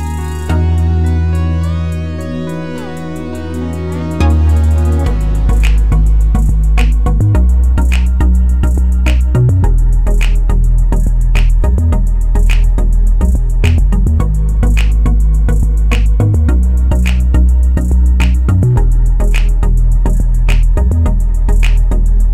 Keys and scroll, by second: 3.1-5.7 typing.